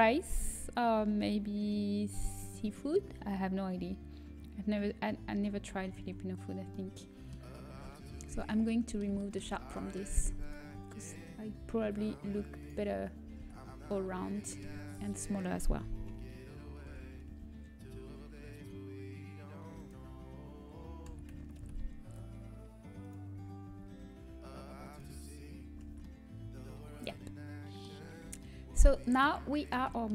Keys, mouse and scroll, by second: 6.6 Tab, 6.6 a, 8.6 Tab, 13.5 Tab, 13.5 a, 16.0 Tab, 16.0 l, 18.0 s, 22.4 s, 23.6 s, 25.9 Tab, 25.9 a.